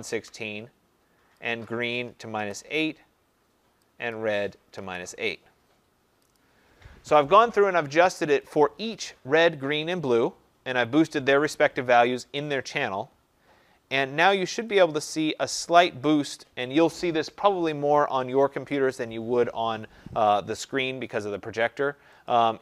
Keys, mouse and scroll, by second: 0.0-0.6 typing, 1.6 click, 2.0-2.8 typing, 4.0 click, 4.6 -, 6.3 click, 8.3 click, 15.6 click, 21.3 click, 22.2 click.